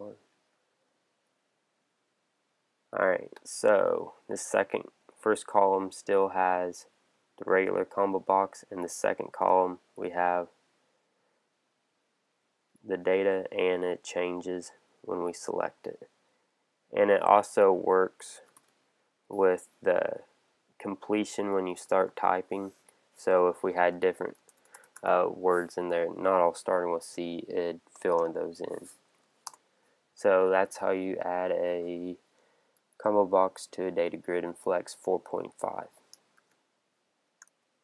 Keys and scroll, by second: 28.1 shift+c, 29.0 Down, 29.4 Return, 36.4 super+q.